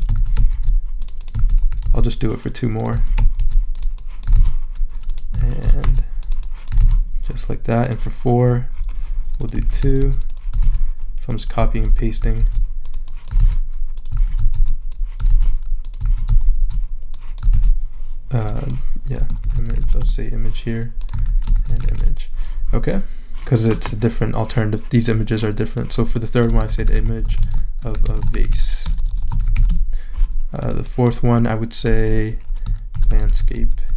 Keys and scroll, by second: 0.1 super+a, 0.5 super+c, 1.4 super+a, 1.8 super+v, 3.0 super+a, 3.4 super+c, 4.3 super+v, 5.4 super+a, 5.8 super+c, 6.8 super+v, 9.6 super+a, 10.0 super+c, 10.6 super+v, 11.6 super+a, 12.4 super+c, 13.4 super+v, 14.2 super+a, 14.5 super+c, 15.3 super+v, 16.0 super+a, 16.5 super+c, 17.5 super+v, 19.2-20.3 typing, 21.2 super+a, 21.4-22.3 typing, 26.4-30.1 typing, 32.7-33.9 typing.